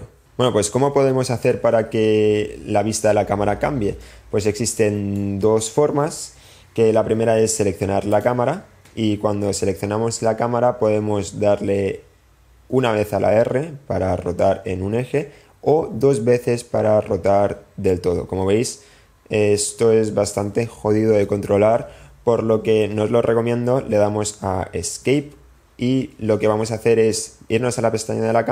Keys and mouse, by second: 5.0-5.5 drag, 6.7 click, 11.9 r, 25.3 Escape.